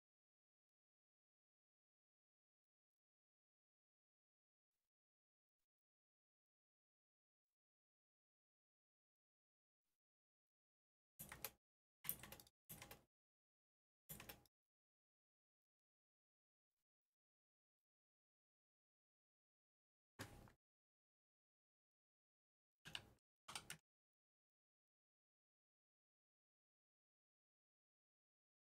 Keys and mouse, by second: 8.5 middle click, 10.7 click, 11.7 click, 12.5 click, 13.2 click, 13.8 click, 14.5 click, 15.5 click, 16.3-20.3 drag, 20.9 ctrl+z, 21.5 F4, 22.2 F3.